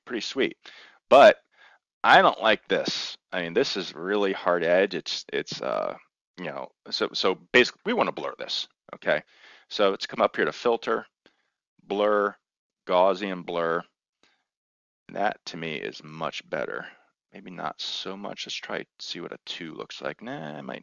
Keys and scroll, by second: 18.4 2.